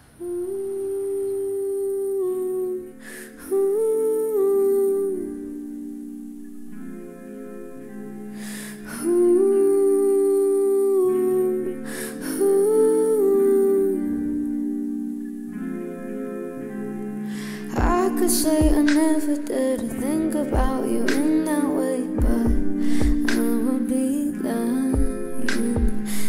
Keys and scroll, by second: 6.4 space, 10.1 space, 19.2 space.